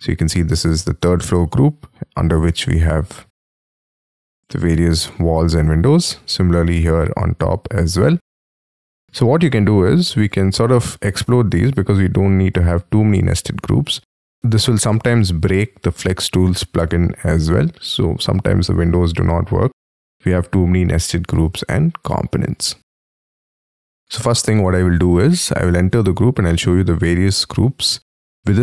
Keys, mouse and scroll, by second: 4.4 j, 5.8-7.1 scroll up 5, 9.4-10.4 scroll up 3, 13.3-16.2 scroll down 5, 23.9 double click, 25.6 double click, 26.4 middle click.